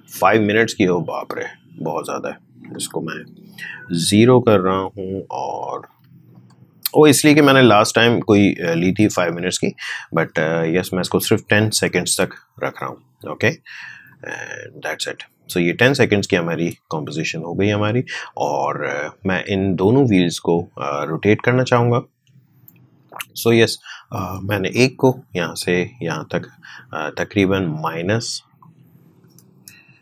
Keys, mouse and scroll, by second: 0.9-4.2 drag, 4.6 0, 5.6 Right, 7.0 shift+;, 7.9 Right, 9.2 shift+Right, 14.0-28.5 drag, 28.5 click.